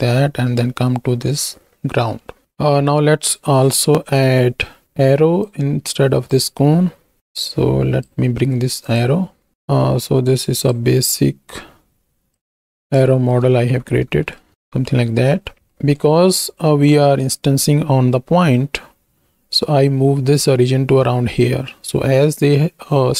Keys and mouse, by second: 2.2 middle click, 4.0 middle click, 5.5 click, 5.7-6.7 drag, 6.7 x, 8.9 click, 9.5 z, 10.5-12.4 drag, 13.1 shift+click, 14.3 shift+click, 15.8 shift+click.